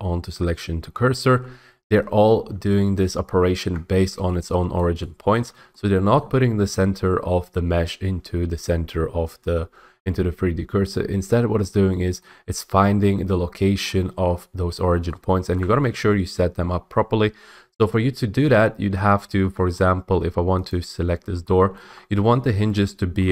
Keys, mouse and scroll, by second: 3.3 ctrl+z, 4.9 scroll, 5.4 middle click, 6.3 shift+middle click, 11.0 middle click, 11.0 middle click, 11.7 middle click, 12.3 shift+middle click, 12.9 middle click, 13.1 middle click, 15.6 scroll, 19.0 middle click, 19.2 middle click, 19.2 middle click, 19.8 middle click, 20.8 click, 21.8 middle click, 22.0 middle click, 22.7 shift+middle click.